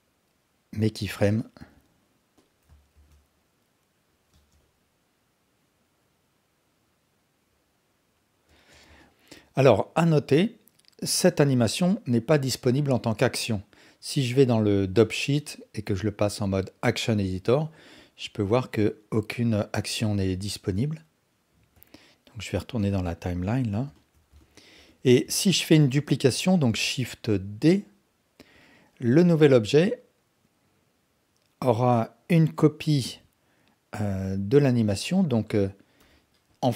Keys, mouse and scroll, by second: 1.3-1.7 drag, 3.0 shift+d, 4.3 space, 8.5 space, 9.0 click, 16.0-17.0 drag, 18.0-20.4 drag, 23.3-23.8 drag, 23.9 alt+shift+drag, 24.4-24.7 ctrl+alt+drag, 24.9 alt+click, 25.3-25.8 ctrl+alt+drag, 26.8 shift+d, 28.5-34.5 drag, 35.2 click, 36.0 g.